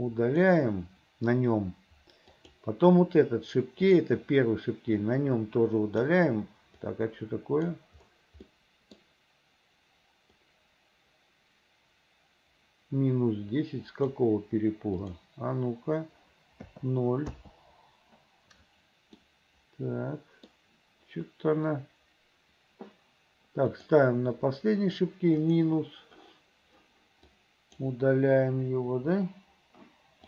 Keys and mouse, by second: 2.4 click, 4.0 click, 5.2-6.2 drag, 7.0 middle click, 7.2 click, 8.6 click, 10.4-14.3 drag, 15.2-17.4 drag, 19.4-20.6 middle drag, 25.5 click, 27.4 click, 28.9 Delete.